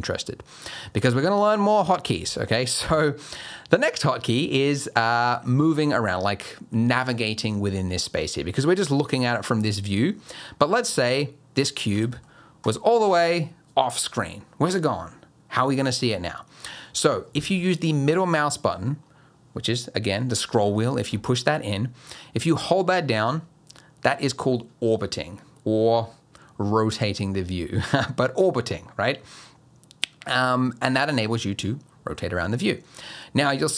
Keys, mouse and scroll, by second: 11.9 g, 22.0 middle click.